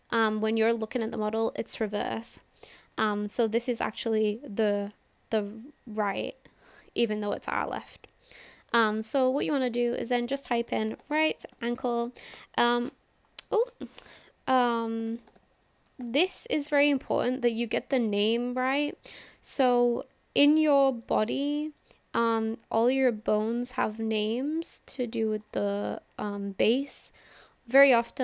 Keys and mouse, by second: 3.9-4.4 shift+middle drag, 9.6-13.1 drag, 13.5-17.7 drag, 19.8 click, 20.8 shift+click, 21.5 shift+click, 23.9 click.